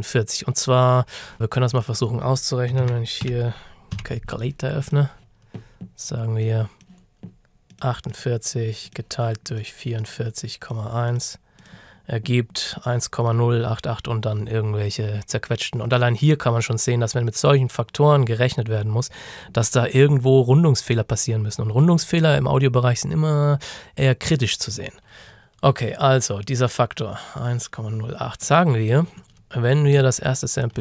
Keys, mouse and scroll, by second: 1.3 click, 1.8 click, 2.5-4.0 typing, 4.9 click, 28.5 click, 30.0 alt+click.